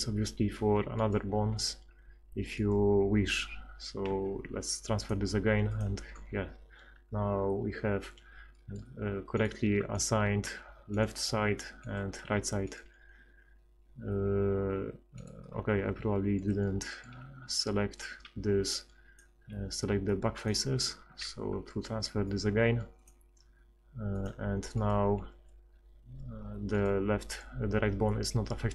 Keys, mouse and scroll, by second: 4.1 ctrl+x, 8.5 middle click, 9.4-10.4 right drag, 10.4 r, 12.2 r, 13.9 r, 17.1 z, 17.4 z, 18.2 b, 19.5 b, 21.1 ctrl+x, 24.2 click, 24.7 right click, 25.3 r, 28.2 r.